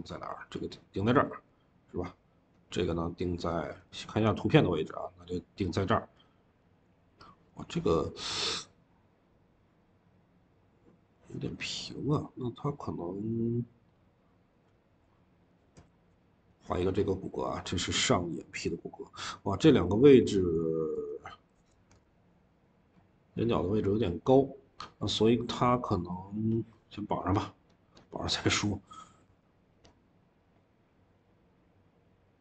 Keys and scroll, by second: 3.5 Escape, 21.5 Escape, 21.8 Escape, 29.1 v.